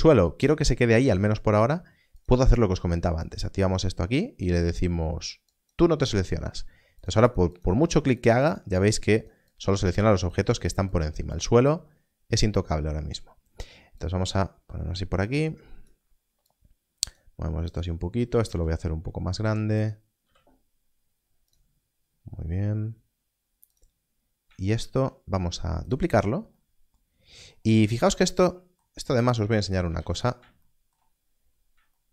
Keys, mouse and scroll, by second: 2.1 click, 5.4 click, 15.8 click, 18.4 s, 19.7 click, 23.7 g, 24.7 shift+d, 25.8 click, 27.8 scroll up 1, 29.2 shift+click, 30.7 x, 31.2 scroll up 1.